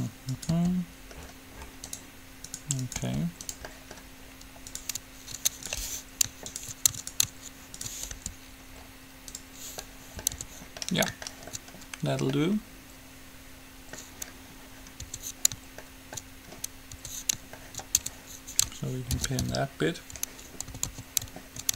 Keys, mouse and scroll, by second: 0.6-2.4 right drag, 0.7 g, 2.9-8.9 right drag, 3.2 g, 3.9-6.5 middle drag, 8.4 g, 8.9-9.9 drag, 10.6 Tab, 15.3 Tab, 17.2 Tab, 18.3 Tab, 19.6 ctrl+l, 19.7 p, 20.9 a, 21.2 a.